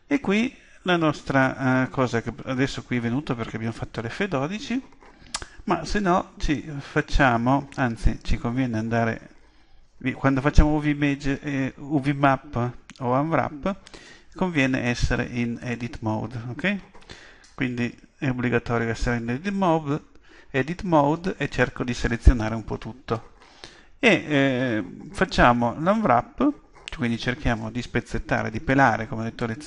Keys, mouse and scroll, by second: 6.5-10.0 drag, 14.8-16.8 drag, 17.6 a, 17.9 a.